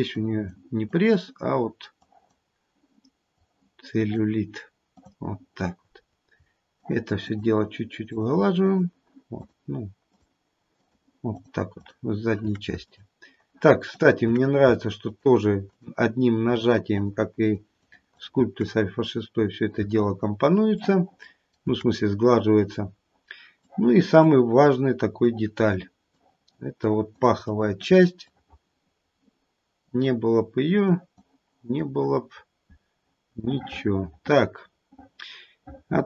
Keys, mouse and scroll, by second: 0.1 click, 0.9 click, 1.9 click, 3.3 click, 3.9 click, 4.9 click, 6.7 shift+click, 7.2 shift+click, 8.6 shift+click, 9.3 shift+click, 10.0 shift+click, 10.8 shift+click, 11.3 shift+click, 11.7 shift+click, 12.8 shift+click, 13.9 shift+click, 15.0 shift+click, 15.6 shift+click, 16.5 shift+click, 16.9 shift+click, 17.4 shift+click, 17.7 shift+click, 18.1 shift+click, 18.6-19.7 scroll down 6, 20.1 shift+middle click, 20.8 shift+middle click, 21.8-22.2 scroll up 2, 22.4-23.6 scroll up 4, 23.6 click, 24.2 click, 25.2 click, 26.1 click, 26.7 click, 28.2 click, 29.8 click, 30.9 click, 31.5 click, 32.3-33.6 scroll down 4, 33.6 middle click, 34.5 middle click.